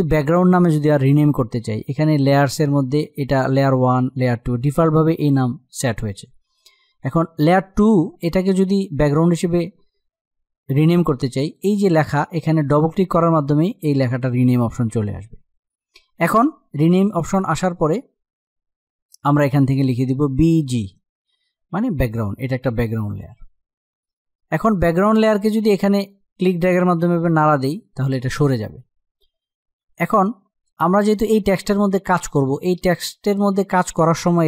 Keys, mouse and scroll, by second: 6.7 click, 11.1 click, 19.5 click, 19.9-20.3 typing, 22.0-29.5 drag, 29.5 z, 30.8 click.